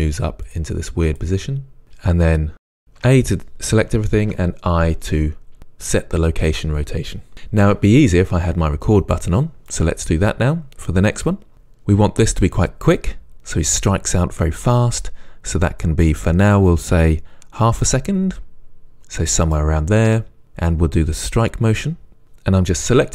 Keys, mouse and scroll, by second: 0.0-1.5 typing, 0.2 click, 1.1 click, 2.0 click, 3.0 a, 4.3 i, 9.7 click, 15.0-18.7 right drag, 20.9 click, 21.2-23.1 typing, 21.7 click, 22.0 click, 22.2 click, 22.4 click, 22.8 click, 23.0 click.